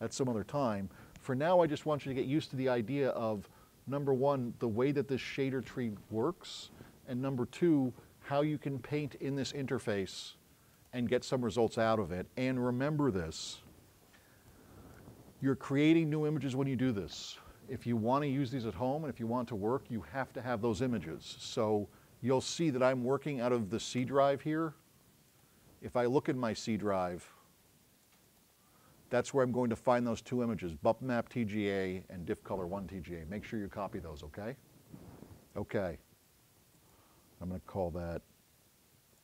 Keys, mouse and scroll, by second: 10.8 click, 11.7 click, 14.6-14.9 drag, 15.5 click, 25.3 click, 26.2 click, 26.8 click, 28.1 click.